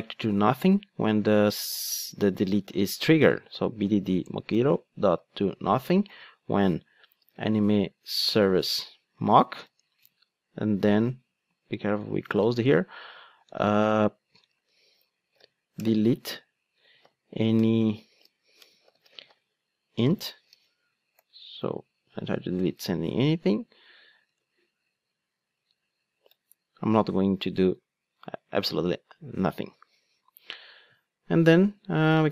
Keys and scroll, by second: 4.3 Return, 15.9 Return, 22.6 alt+Return.